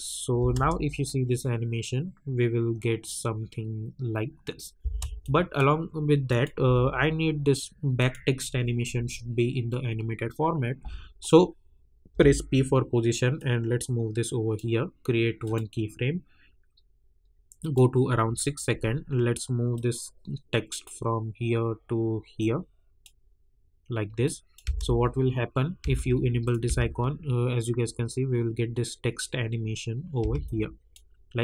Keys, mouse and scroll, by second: 0.4 space, 4.8 space, 5.2 click, 6.6 u, 7.9 click, 12.1 p, 13.3-15.4 drag, 17.6-24.2 drag, 24.6 space, 26.4 click, 26.6 space, 30.2 space, 30.4-31.4 drag.